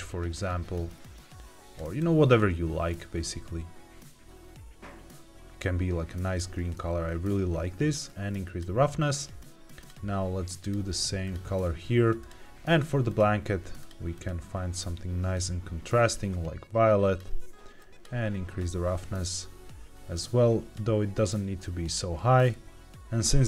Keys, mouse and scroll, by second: 8.0 click, 9.7 click, 10.5 click, 12.1 click, 13.0 click, 13.7 click, 17.7 click, 20.0 click, 21.2 click, 22.3 scroll down 2, 23.0 click, 23.0-23.4 scroll up 2.